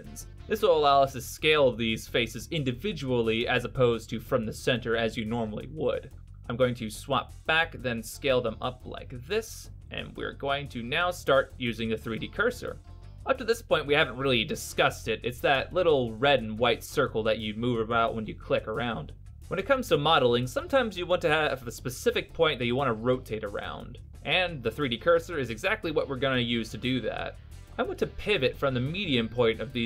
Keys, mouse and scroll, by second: 0.2 s, 7.5 click, 8.2 click, 9.7 s.